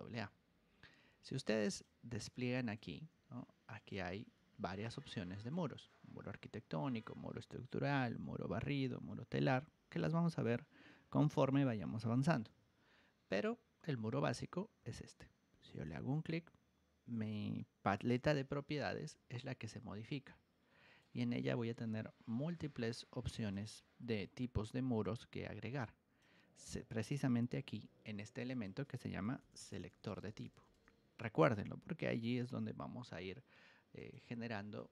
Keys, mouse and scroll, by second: 1.2 ctrl+1, 1.7 click, 2.2 ctrl+click, 3.1 Escape, 3.7 click, 4.3 ctrl+1, 4.6 click, 5.4-6.9 ctrl+drag, 12.4 Escape, 15.6 click, 18.2 2, 18.7 r, 19.5-20.9 ctrl+drag, 21.9 Escape, 23.3 Return, 23.3 click, 24.0 g, 25.0 ctrl+Return, 25.0-26.1 ctrl+drag, 27.3-30.9 typing, 28.4 click, 33.9 click.